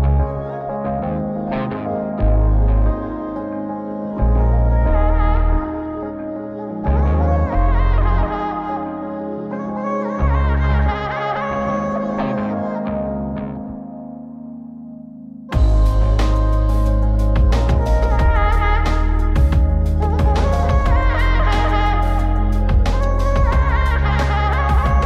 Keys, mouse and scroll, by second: 0.3-1.8 drag, 2.3 click, 2.6 x, 3.7 click, 5.2 click, 6.4-7.9 middle drag, 8.7 click, 10.5 x, 11.3 click, 12.3-13.7 drag, 14.6 click, 15.6-16.4 middle drag, 16.5 scroll up 1, 16.7-17.1 scroll down 3, 17.2-17.8 middle drag, 18.1 click, 19.0 Tab, 20.2 middle click, 22.4 3, 23.4 alt+a, 23.8 c.